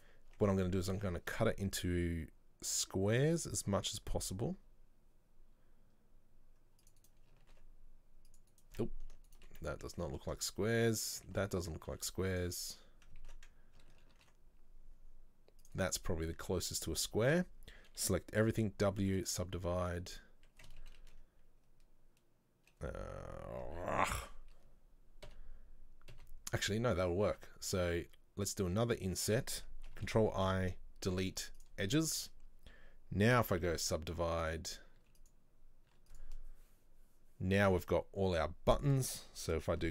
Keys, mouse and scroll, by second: 0.0 right click, 0.4 Tab, 0.6 middle click, 1.0 ctrl+r, 7.5 ctrl+r, 9.4 alt+right click, 10.0 ctrl+z, 10.2 ctrl+z, 12.0 ctrl+r, 16.2 middle click, 16.4-16.8 scroll down 2, 16.8 middle click, 17.4 a, 19.6 w, 20.9 ctrl+z, 21.1 ctrl+z, 30.6 Delete, 32.0 scroll up 1, 32.3 a, 35.1 w, 36.0 w, 38.3-38.8 scroll up 2, 39.3 shift+middle click.